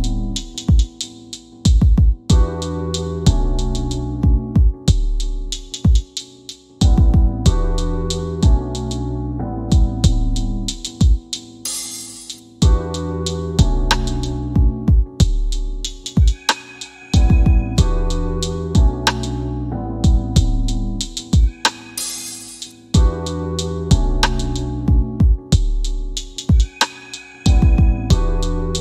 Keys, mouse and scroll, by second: 0.4 scroll up 1, 0.8 middle click, 4.8 click, 7.5-8.9 scroll down 1, 8.9 click, 25.0 scroll up 1, 25.7 middle click.